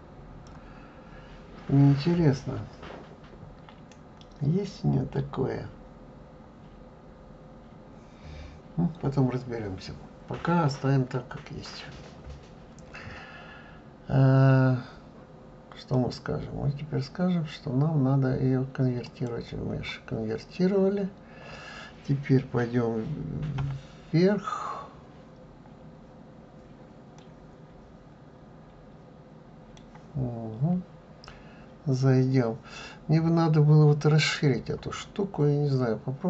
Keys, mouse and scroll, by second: 15.9-18.9 right drag, 21.0 scroll up 2, 23.6 KP_7, 24.7-25.6 scroll down 1, 26.3-27.2 scroll up 2, 27.2-30.2 middle drag, 35.2-36.0 scroll up 2, 36.0-36.2 scroll down 1.